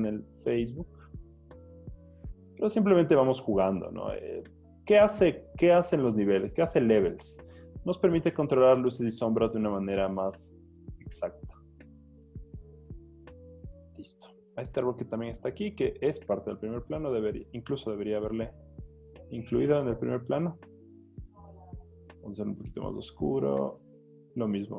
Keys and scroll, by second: 16.8 super+l.